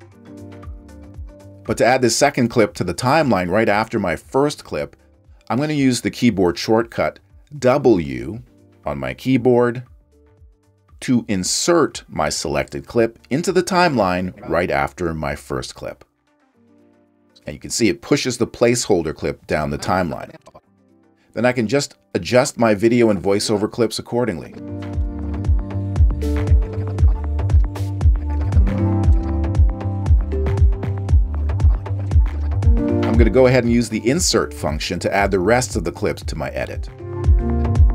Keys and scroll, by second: 10.5 w, 15.8 super+-, 26.3 space, 27.2 space, 28.2 space, 31.6 space, 32.0 space, 32.6 space.